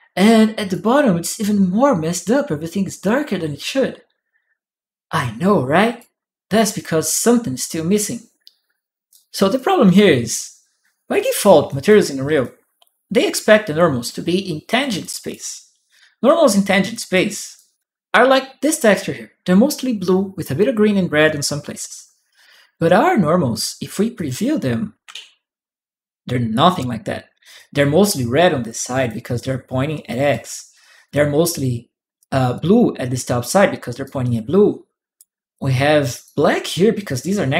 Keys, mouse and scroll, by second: 1.1-5.7 drag, 6.5 click, 8.9 click, 8.9 right click, 11.4 click, 12.2-13.8 drag, 14.6 click, 14.8 right click, 15.7-16.9 right drag, 16.0 click, 17.3 right click, 18.4 click, 22.2 right click, 23.3 click, 23.9 click, 24.8 shift+p, 26.1 click, 26.2 right click, 27.3-28.8 drag, 30.1 click, 32.0 click, 33.8-34.9 right drag, 35.3 click, 37.4 click.